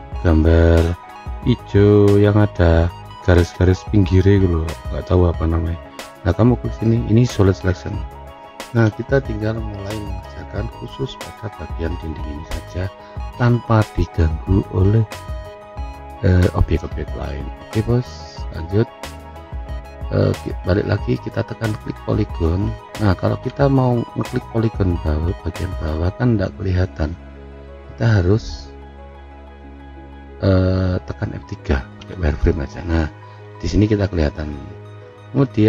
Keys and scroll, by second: 32.6 F3.